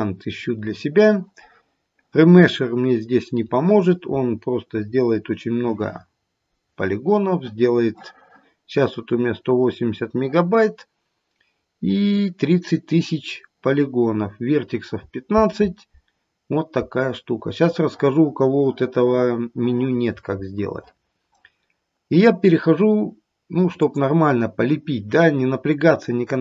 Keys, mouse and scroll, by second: 0.4-1.6 scroll down 1, 23.8 click.